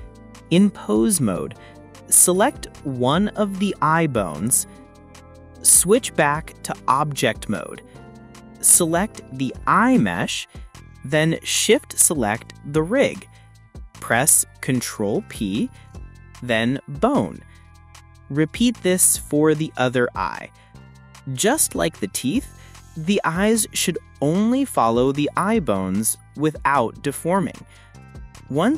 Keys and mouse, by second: 5.8-7.0 drag, 7.7 click, 9.5 shift+click, 11.3 ctrl+p, 13.9-16.9 drag, 17.6 click, 19.1 click, 20.8-21.4 drag, 22.2 click, 23.7 shift+click, 26.3 ctrl+z, 27.1 shift+click.